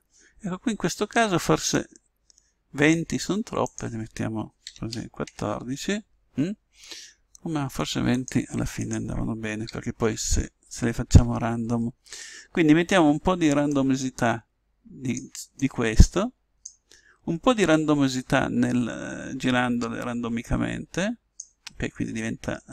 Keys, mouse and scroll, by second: 1.7 click, 3.6 click, 8.8 click, 15.6 click, 17.6 click.